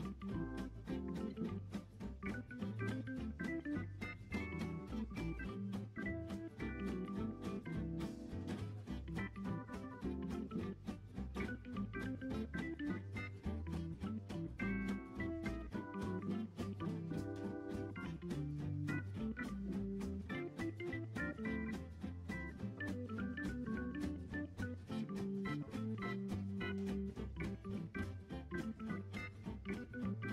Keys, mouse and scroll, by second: 0.4 middle click, 1.0-1.8 scroll up 6, 1.3 middle click, 1.8 click, 5.2-8.0 drag, 8.0-9.5 right drag, 9.5 click, 9.9 click, 10.5-11.0 middle drag, 11.0-15.3 right drag, 15.3-15.9 scroll down 1, 15.9 scroll up 3, 16.2 click, 16.5-16.9 scroll down 2, 16.9-17.6 scroll up 3, 17.6 click, 17.9-19.3 right drag, 19.3 click, 19.8-22.8 drag, 22.9 click, 23.7 click, 24.2 click, 25.5-28.5 drag, 29.1 click.